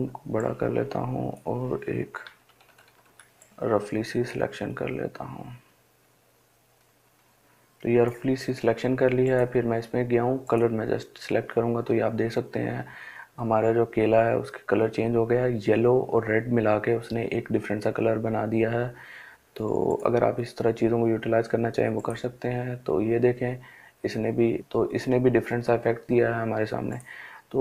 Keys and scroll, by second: 1.5 [, 1.7 [.